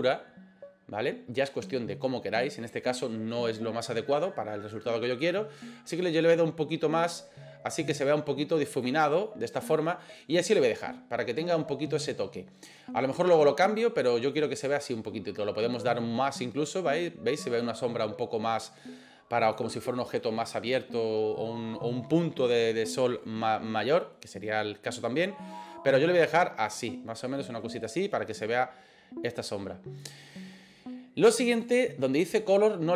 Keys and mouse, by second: 6.2-8.8 drag, 16.0-19.6 drag, 25.7-30.1 drag.